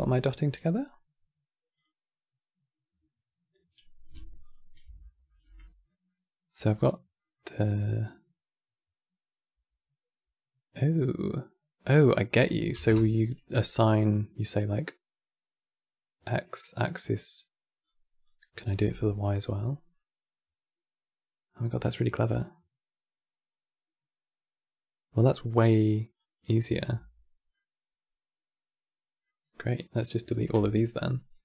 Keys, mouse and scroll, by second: 4.1 ctrl+shift+click, 4.7 middle click, 5.2-5.6 scroll up 3, 5.6-6.2 middle drag, 6.2-6.9 drag, 6.9 middle click, 7.8-10.8 drag, 11.7-13.8 drag, 13.8-16.9 middle drag, 17.6-19.3 drag, 19.3 middle click, 20.4-21.7 middle drag, 21.9-22.5 middle drag, 25.9-27.3 drag, 27.3 middle click.